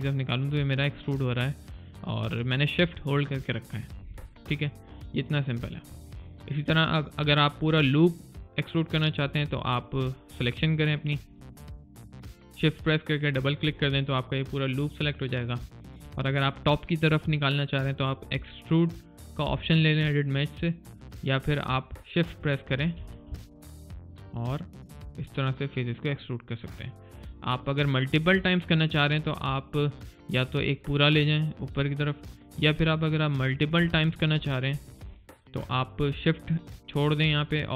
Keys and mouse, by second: 5.5 right click, 5.8 click, 6.2 middle click, 6.6 click, 11.1 click, 14.2 alt+middle click, 14.7 alt+right click, 15.1 alt+click, 15.5 alt+middle click, 15.9 alt+click, 19.8 click, 23.7 click, 29.3 alt+right click, 29.8 alt+middle click, 30.5 alt+click, 33.9 middle click, 34.3 click, 34.7 middle click, 35.0 click.